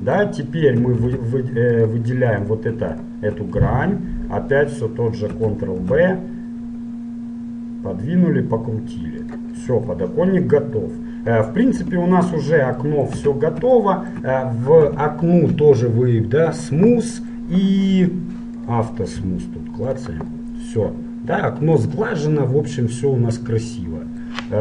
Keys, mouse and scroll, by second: 1.1 ctrl+Tab, 2.5-3.9 right drag, 3.9-5.6 middle drag, 6.0 ctrl+b, 9.8-13.0 middle drag, 11.8 KP_Decimal, 11.9 KP_Decimal, 13.1-14.3 middle drag, 13.3 Tab, 15.0 t, 16.6-18.5 drag, 18.5 middle click, 18.9-22.0 drag, 20.5-22.0 middle drag, 22.2 middle click, 22.4 middle click, 23.0 middle click, 24.3-24.6 middle drag.